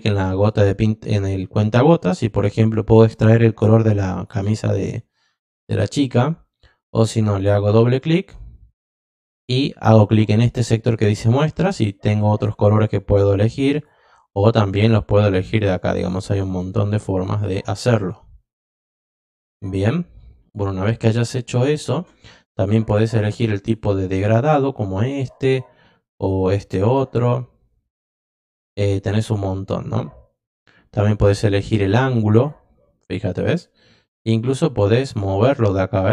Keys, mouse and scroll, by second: 0.4 click, 4.1 click, 7.4 click, 7.6 click, 12.2 click, 13.7 click, 14.8-15.3 drag, 15.7-16.3 drag, 16.4 click, 18.0 click, 23.5 click, 25.3 click, 26.3 click, 28.7 click, 30.9 click, 32.3 click, 35.0-36.1 drag.